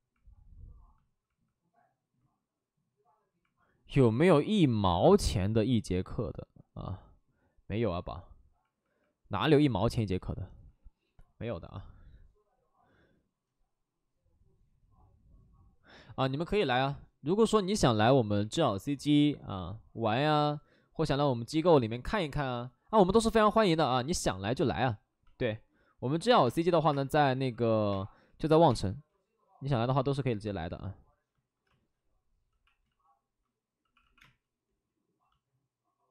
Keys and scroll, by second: 1.1 alt+s, 1.7 alt+s, 26.4-28.6 typing, 29.9 ctrl+z, 31.6 space, 32.5 x, 32.8 ctrl+z, 33.7 x, 34.1 x, 34.1 space.